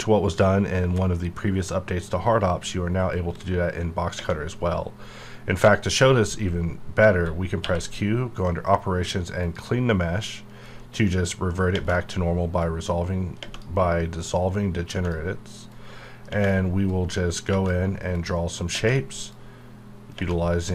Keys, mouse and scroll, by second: 3.1 click, 7.6 q, 9.4 click, 12.6 click, 14.2 click, 15.7 click, 16.9 click, 18.1 click, 19.3 click.